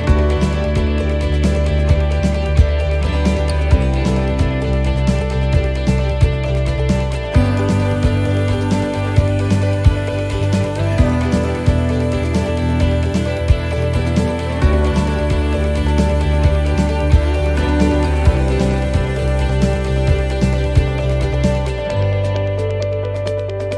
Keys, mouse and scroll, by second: 9.1 shift+middle click, 9.1 scroll down 2, 10.1 right click, 10.7 right click, 14.1 middle click, 15.6 shift+middle click, 16.1-16.7 scroll up 1, 16.7 shift+middle click, 16.7 scroll up 1.